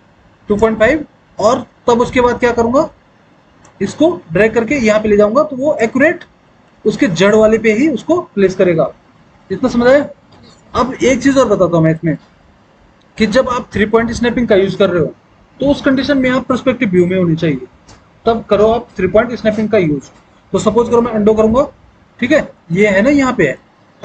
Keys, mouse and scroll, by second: 6.9 alt+w, 7.3 alt+w, 12.3 alt+w, 21.5 ctrl+z, 23.0 alt+w.